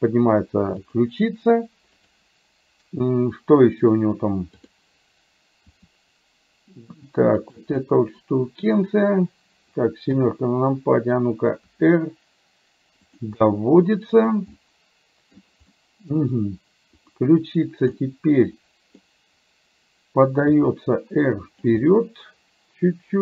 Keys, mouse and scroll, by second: 2.1 click, 4.8 click, 5.8 r, 7.8-8.8 middle drag, 7.8-8.8 scroll down 1, 10.2 KP_7, 11.8 r, 13.4-14.4 middle drag, 14.6-15.6 middle drag, 14.6 scroll down 1, 15.8 middle click, 18.1-19.1 middle drag, 20.6 r, 21.8-23.2 middle drag.